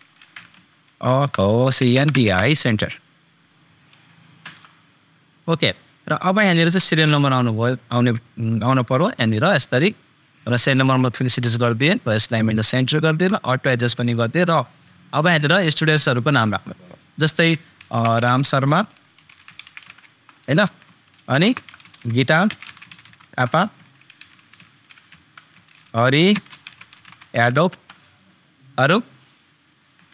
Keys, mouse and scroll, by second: 1.1 super+BackSpace, 1.8 shift+super+e, 1.9 super+n, 2.3 super+r, 4.4 super+Return, 5.7-14.0 super+drag, 17.4 super+click, 17.8 shift+super+r, 17.9 super+a, 18.0 super+m, 18.2 super+space, 19.1 shift+super+s, 19.3 shift+super+h, 19.6 super+r, 19.6 super+m, 19.8 super+a, 20.0 Return, 20.8 super+Return, 21.3 shift+super+c, 21.4 super+i, 21.6 super+t, 21.8 super+a, 21.9 super+space, 22.4 shift+super+t, 22.6 super+h, 22.9 super+p, 23.0 super+a, 23.1 super+Return, 24.1 shift+super+h, 24.6 super+a, 25.0 super+BackSpace, 25.5 super+a, 25.8 super+r, 25.9 super+i, 26.3 space, 26.6 shift+super+y, 26.7 super+a, 27.7 super+Return.